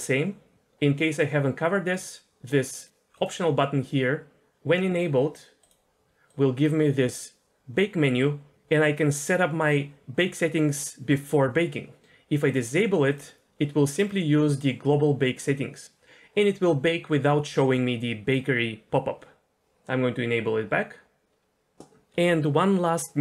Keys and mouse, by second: 2.8 click, 3.1 click, 5.6-12.0 drag, 12.5 click, 13.1 click.